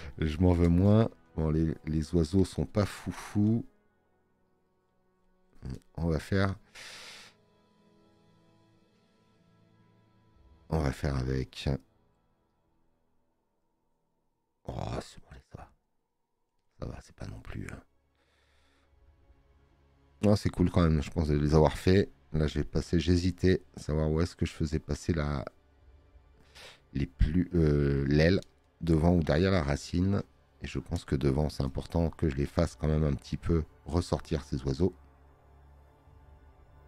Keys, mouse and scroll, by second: 21.6 click.